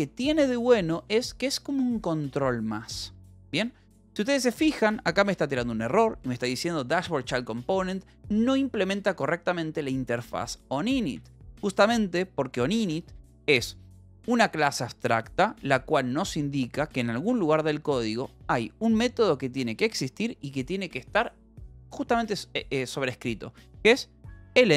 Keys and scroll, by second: 0.5 h, 1.1 h, 3.3 l, 3.9 l, 4.5 l, 5.3 d, 11.7 Escape, 12.9 j, 15.5 j, 17.3 o, 17.9 Return.